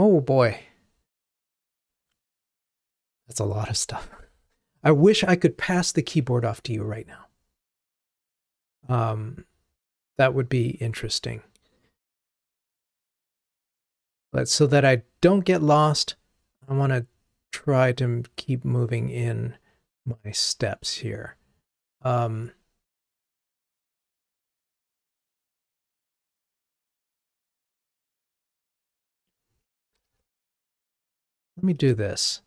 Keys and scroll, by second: 30.2 super+z.